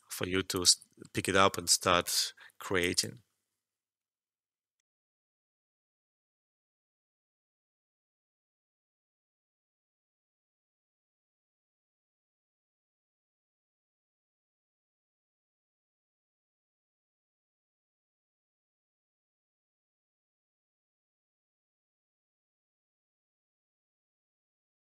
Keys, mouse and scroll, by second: 0.6 typing, 2.5 alt+middle click, 2.8 alt+click, 4.7 typing.